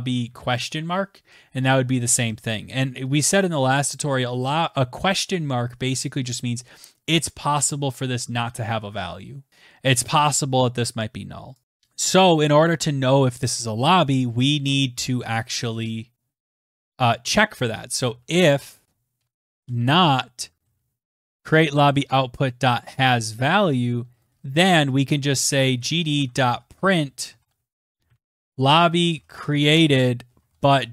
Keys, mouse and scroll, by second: 2.5 typing, 4.5 click, 11.4 Return, 11.6 Tab, 11.6 BackSpace, 16.5-30.5 typing, 20.2 Tab, 22.3 Right.